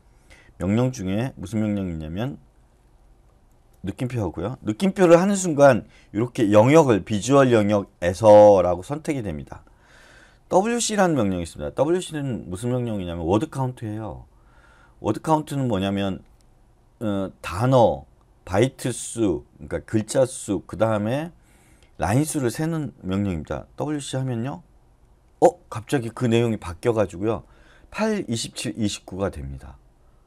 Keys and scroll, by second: 10.5 typing, 23.8 Return.